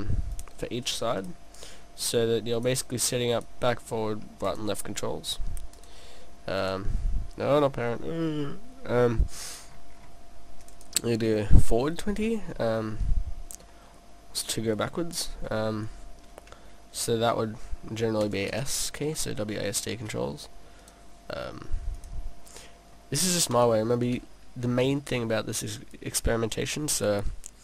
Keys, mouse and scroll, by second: 0.4 click, 3.3 click, 5.8 click, 7.8 middle click, 9.6-10.7 scroll up 4, 10.7 click, 10.7 scroll up 1, 10.8 click, 12.2 middle click, 13.7 middle click, 14.1 scroll down 2, 15.3 scroll down 1, 15.9 click, 18.3 click, 19.2 middle click, 20.8 click, 22.0 click, 22.6 middle click, 23.5 click, 24.7 click, 26.0 click.